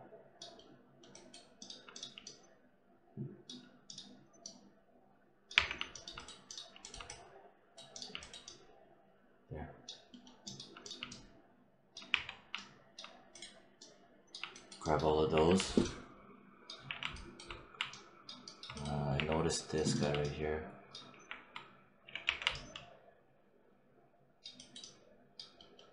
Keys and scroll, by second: 5.4 3, 12.0 4, 15.2 6, 16.7 4, 19.0 5, 20.9 5.